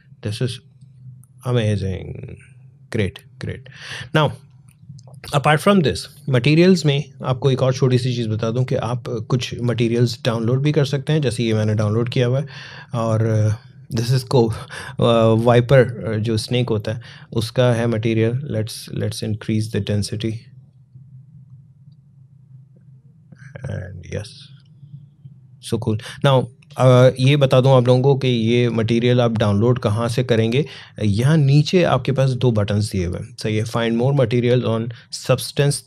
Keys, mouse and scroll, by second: 0.4 click, 3.4 click, 6.7-8.4 scroll up 1, 8.4-11.3 drag, 18.5-24.2 drag, 24.4-26.6 scroll up 1, 28.7 scroll down 1.